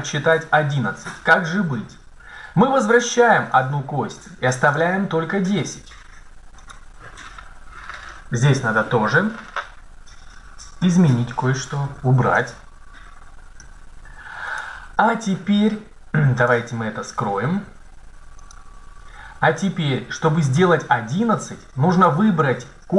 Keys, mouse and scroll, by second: 3.5-5.4 drag, 6.4 right click, 7.7 Tab, 7.7 right click, 11.3 BackSpace, 11.8 BackSpace, 12.2 BackSpace, 13.4 Tab, 16.3-18.1 right drag, 18.2-19.7 drag, 22.8 right click.